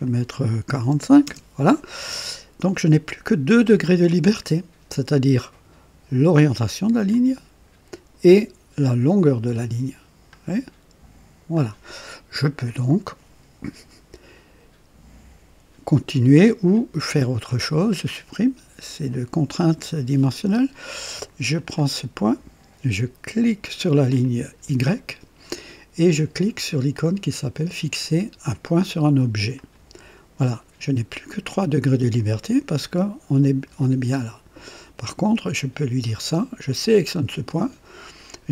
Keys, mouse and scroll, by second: 0.7 KP_4, 0.9 KP_5, 1.1 KP_Enter, 6.2-8.2 drag, 10.2-11.6 drag, 16.6 click, 17.5 Delete, 17.7 Delete, 19.0 click, 19.4 Delete, 21.4 click, 24.1 click, 29.4 click, 36.6 click.